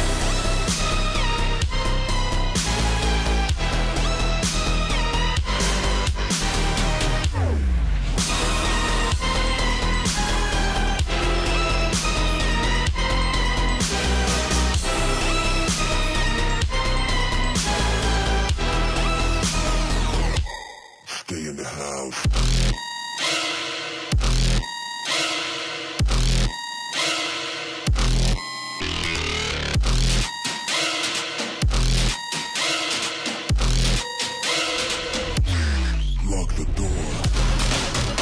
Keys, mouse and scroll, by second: 1.7 alt+scroll up 1, 2.1 click, 2.8 Right, 3.8 click, 5.0 right click, 5.4-7.6 drag, 8.1 Left, 8.7 Down, 8.9 Up, 9.3 Right, 9.9-10.2 alt+scroll down 1, 10.4 click, 10.7 alt+scroll down 1, 11.0 click, 11.2 space, 12.4 click, 13.2 alt+scroll up 1, 13.6 shift+click, 14.4 alt+scroll down 1, 14.5 click, 15.0-15.5 alt+scroll down 1, 15.5 i, 16.0 click, 17.4-17.8 alt+scroll up 1, 18.2 alt+scroll down 1, 18.9 click, 19.9 right click, 20.5 click, 21.2 alt+scroll up 1, 21.5 click, 21.7 right click, 22.3 click, 24.9 alt+scroll up 1, 25.2 shift+click, 26.6-27.2 alt+scroll down 3, 26.7 space, 27.3 click, 27.5 space, 28.3 i, 31.6 click, 33.0 click, 34.7-35.2 alt+scroll up 1, 35.6 alt+scroll down 1, 35.8 click, 36.8 i, 37.1 click.